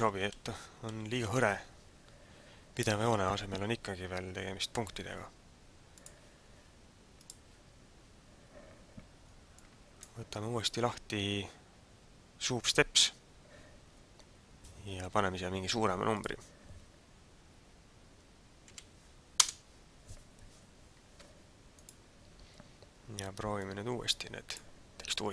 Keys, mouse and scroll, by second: 9.6 click, 16.1 click, 21.2 ctrl+s, 23.6 click.